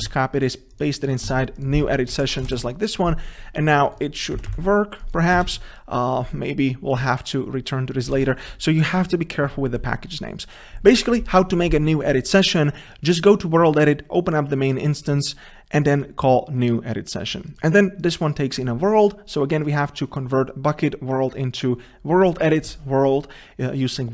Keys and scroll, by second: 0.1 ctrl+c, 4.4 ctrl+v, 5.4 Delete, 5.5 ctrl+space.